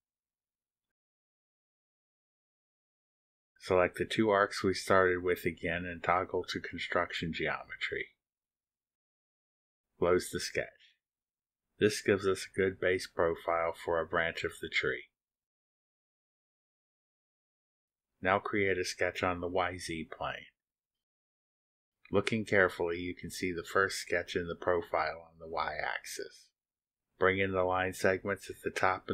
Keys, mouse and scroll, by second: 2.6 1, 6.6 scroll up 2, 7.2 click, 8.1 ctrl+click, 9.2 click, 11.4 click, 12.6 click, 13.2 middle click, 13.2-13.6 scroll down 2, 14.3 click, 15.0 click, 16.4-16.8 scroll down 1, 17.3 click, 18.0 click, 20.1 click, 21.2 click, 23.6 click, 26.2 click.